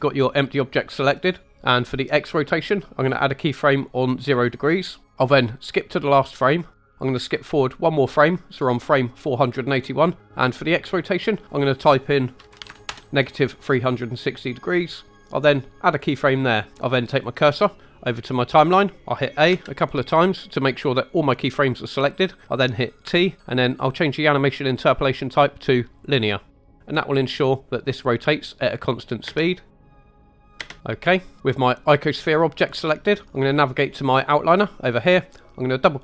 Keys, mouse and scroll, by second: 4.5 click, 6.4 click, 7.8 click, 11.4-12.9 drag, 15.8-18.0 drag, 19.5 a, 23.0 t, 29.3 space, 30.5 space, 31.9 click.